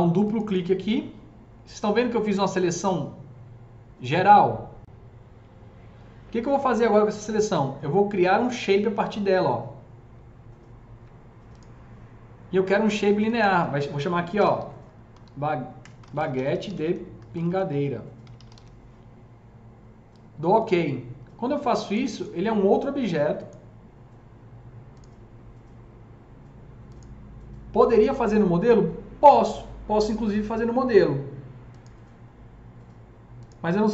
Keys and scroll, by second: 14.3-18.8 typing.